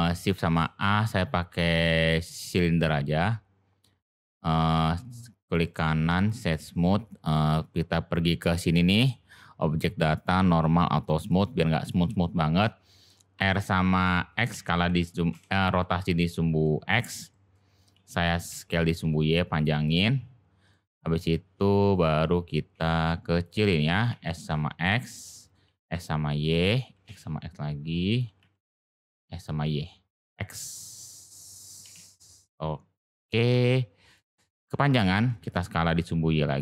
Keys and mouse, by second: 0.2 click, 0.5 shift+a, 5.4 click, 8.9 click, 10.1 click, 10.9 click, 13.3 r, 16.6 middle click, 17.3 middle click, 17.9 s, 20.7 middle click, 21.1 g, 23.8 s, 25.0-25.5 middle drag, 30.7-31.1 middle drag, 31.8 g, 34.7 s.